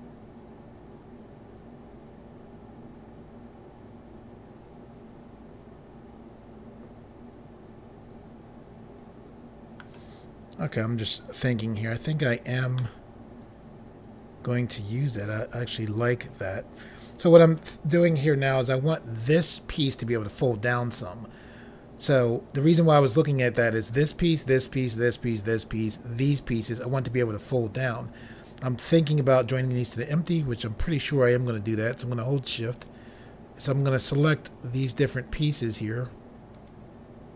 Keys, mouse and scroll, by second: 10.6 click, 12.8 middle click, 32.8 shift+click, 33.8 shift+click, 34.9 shift+click, 36.6 shift+click.